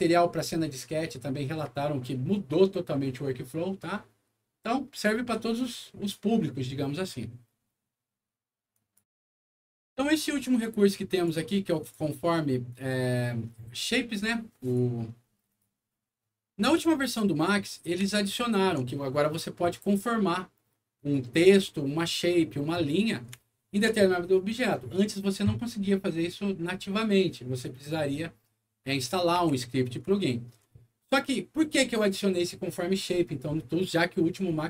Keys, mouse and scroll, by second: 8.7 click, 9.0 z, 11.1 click, 11.8 click, 12.7 click, 14.6 click, 15.5 click, 16.5 scroll up 1, 17.0 click, 17.7 scroll down 1, 18.2 alt+middle click, 19.0 alt+middle click, 20.9 alt+click, 23.5 alt+middle click, 24.2 alt+middle click, 29.0 middle click, 29.3 w, 30.1 alt+middle click.